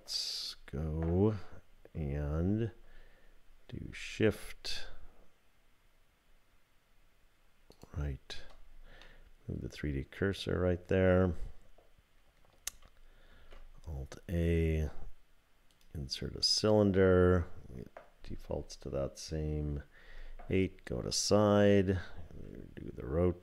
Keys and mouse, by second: 7.7 shift+click, 9.0-11.2 middle drag, 13.3 shift+a, 20.0 KP_3, 22.3 r.